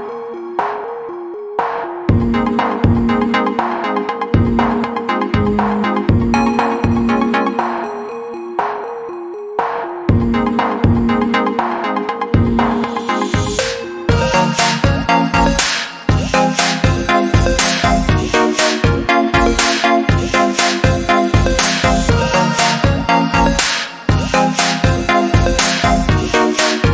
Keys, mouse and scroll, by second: 26.1 ctrl+z.